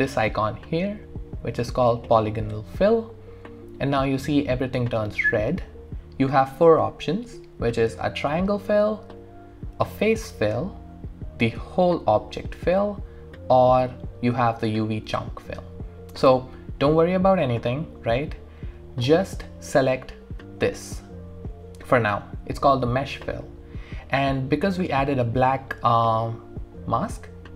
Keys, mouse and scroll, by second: 2.8 click, 2.8 typing, 8.0 click, 8.0 typing, 11.5 typing, 11.6 click, 14.1 typing.